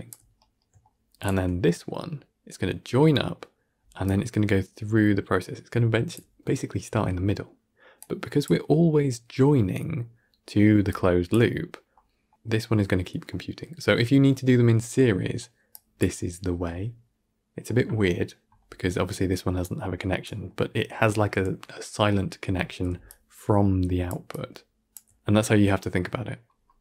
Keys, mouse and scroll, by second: 24.8 d.